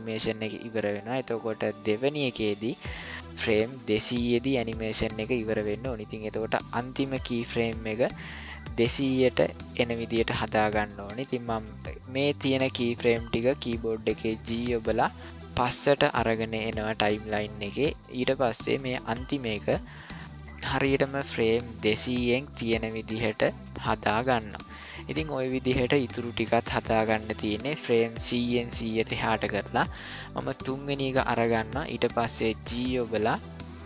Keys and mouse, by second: 1.2-2.8 middle drag, 14.4 g, 25.1-26.1 middle drag, 30.6 click, 32.6 g.